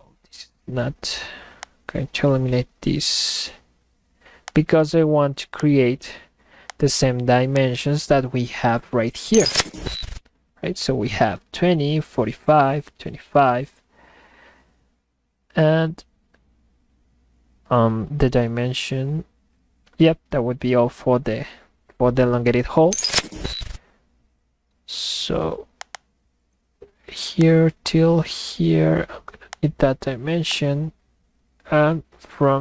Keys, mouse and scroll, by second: 1.6 click, 4.4 click, 5.6 click, 6.7 click, 7.6 click, 25.8 click, 26.0 click, 27.4 click, 29.5 click, 30.5 click.